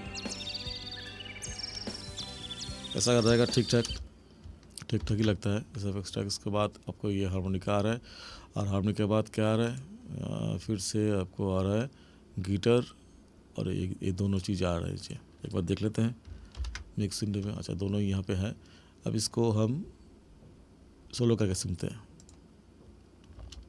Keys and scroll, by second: 3.9 space, 5.1 ctrl+=, 16.5 ctrl+=, 23.4 space.